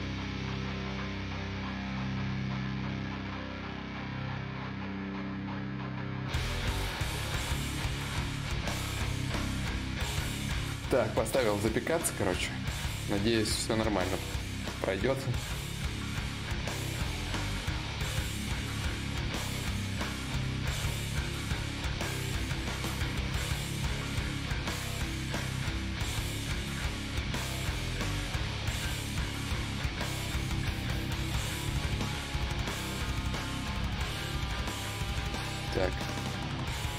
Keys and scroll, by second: 8.5 alt+Tab.